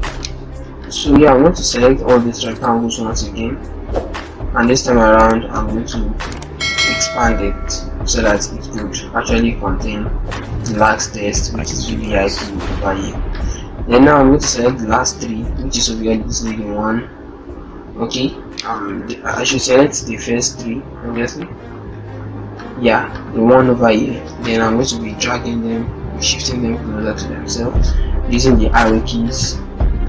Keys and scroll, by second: 7.1 ctrl+t, 15.5 ctrl+shift+Left, 17.8 Right.